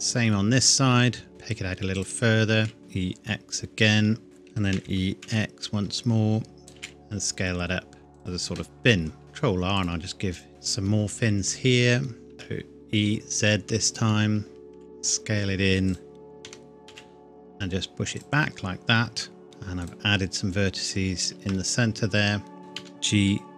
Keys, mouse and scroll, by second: 2.0 click, 2.6 s, 2.8 x, 4.2 click, 4.8 e, 5.3 x, 6.6 click, 6.8 s, 8.2 click, 9.2 ctrl+r, 9.8 click, 13.9 click, 14.8 s, 15.9 click, 16.4 g, 16.9 x, 18.2 click, 22.8 g.